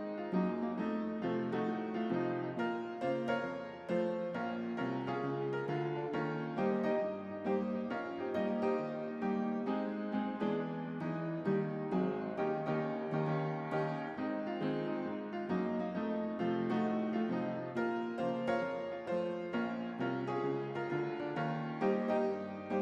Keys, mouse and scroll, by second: 5.2-5.7 drag, 9.9 space, 12.6 click, 13.5-18.4 shift+drag, 20.1-20.7 typing, 22.0-22.8 typing.